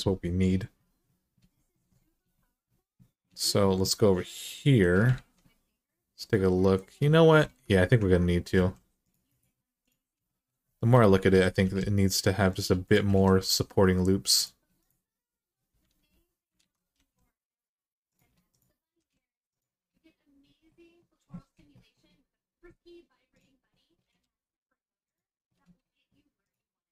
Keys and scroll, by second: 4.9 alt+z, 7.3 alt+z, 8.3 ctrl+r, 11.4 g, 12.9 g, 15.7 alt+z, 16.4 alt+z, 16.7 g, 18.8 g, 23.0 g, 23.8 g.